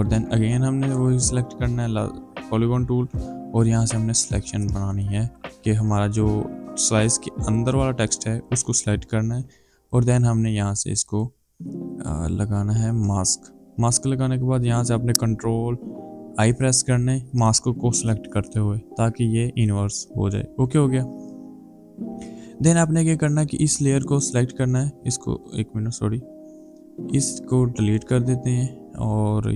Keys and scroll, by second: 16.4 ctrl+i.